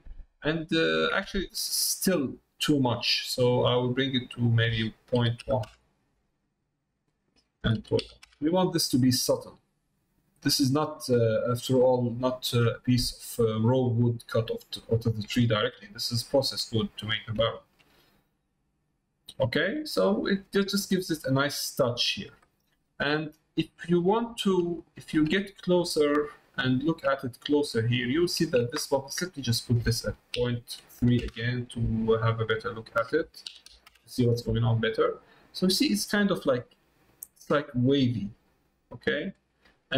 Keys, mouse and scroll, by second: 0.0 middle click, 1.3 ctrl+middle click, 1.9-2.9 middle drag, 4.4-6.3 drag, 7.0-8.7 drag, 9.4 middle click, 10.5 middle click, 11.3 middle click, 11.9 middle click, 12.3 shift+middle click, 12.7 middle click, 13.2 middle click, 13.9 middle click, 15.0 middle click, 15.4 shift+middle click, 15.9 middle click, 17.0 middle click, 17.5 shift+middle click, 18.0-19.5 middle drag, 19.6 middle click, 24.8 shift+middle click, 25.4 middle click, 26.3 shift+middle click, 27.1 middle click, 27.8 shift+middle click, 29.5-32.1 drag, 32.7-34.4 drag, 39.9 middle click.